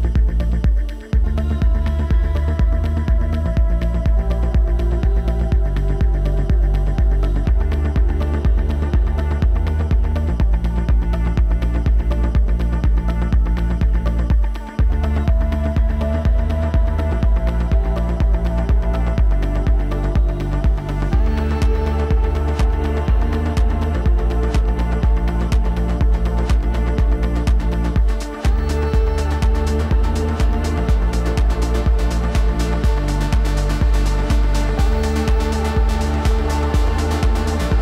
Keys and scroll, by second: 6.5 ctrl+t, 31.7 ctrl+t.